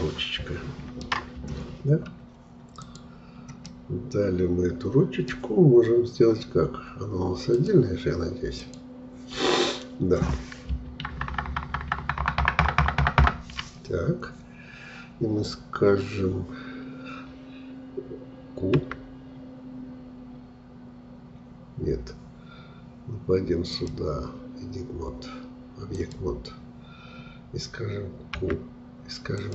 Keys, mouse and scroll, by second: 1.4-2.0 scroll up 1, 2.0-2.4 scroll down 2, 2.7 click, 3.6-6.7 middle drag, 7.5-10.9 drag, 10.9 ctrl+KP_Add, 11.1 ctrl+KP_Add, 11.3 ctrl+KP_Add, 11.5 ctrl+KP_Add, 11.6 ctrl+KP_Add, 12.0 ctrl+KP_Add, 18.8 q, 23.7-28.3 drag, 28.3 q.